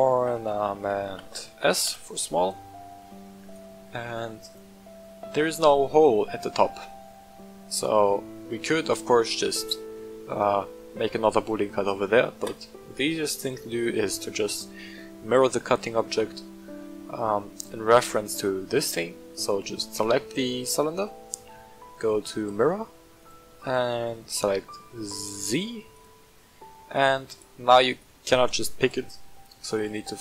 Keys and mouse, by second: 3.4 right click, 4.5 drag, 5.6 shift+middle click, 6.2 middle drag, 7.7-8.1 middle drag, 12.5-17.6 drag, 17.9-19.3 right drag, 23.0-27.5 drag, 29.6-30.2 drag.